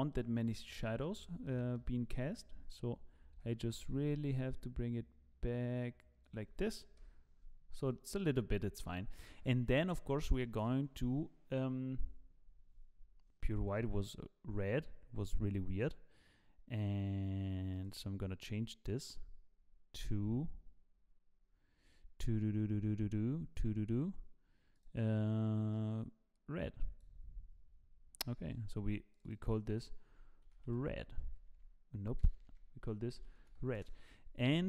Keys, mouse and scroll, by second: 0.1 middle click, 0.8-1.4 scroll up 5, 1.5 shift+middle click, 2.1-2.5 scroll up 4, 5.1 g, 7.1 KP_0, 7.8 click, 8.8 click, 12.0 click, 17.7 click, 21.8-24.7 scroll down 5, 24.7 click, 24.7-25.3 scroll down 4, 28.2-29.1 scroll up 10, 29.1 click, 29.1 scroll up 1, 29.3 click, 31.7 Insert, 32.5 BackSpace.